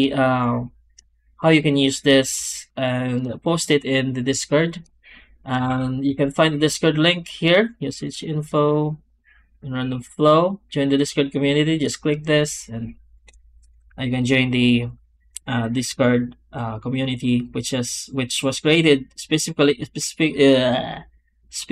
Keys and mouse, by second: 0.0 shift+middle click, 5.5 shift+q.